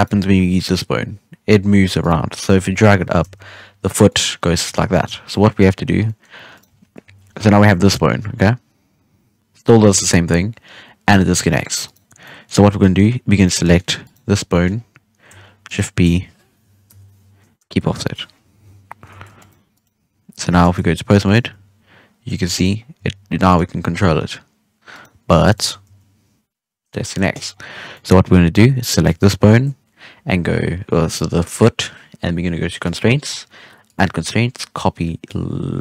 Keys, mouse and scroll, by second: 0.3 g, 2.4 KP_3, 2.9 g, 4.8 ctrl+z, 5.2-5.6 middle drag, 5.6 scroll up 2, 5.9 scroll down 1, 6.0-6.5 middle drag, 6.5 right click, 7.0 KP_3, 7.6 g, 12.0 scroll up 1, 12.2-12.6 middle drag, 12.6 Tab, 12.7-13.3 middle drag, 13.3 right click, 13.6-14.0 middle drag, 14.0 right click, 14.2 scroll down 1, 14.4 middle drag, 14.7-15.4 scroll up 2, 15.4 scroll up 4, 15.6 shift+right click, 16.8 ctrl+p, 18.5 KP_3, 19.1 ctrl+Tab, 19.7 right click, 20.6 ctrl+Tab, 21.2 right click, 21.3 g, 22.7 scroll down 1, 22.9 g, 23.8 r, 25.2-25.5 scroll down 3, 25.5-25.8 shift+middle drag, 25.8 g, 27.4-27.9 scroll up 1, 27.9-29.0 middle drag, 29.0-31.4 drag, 32.8 click, 33.8-35.8 drag.